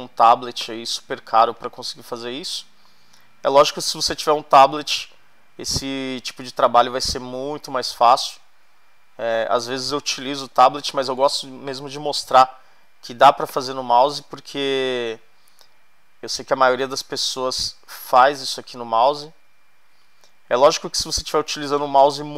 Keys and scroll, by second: 10.5 space.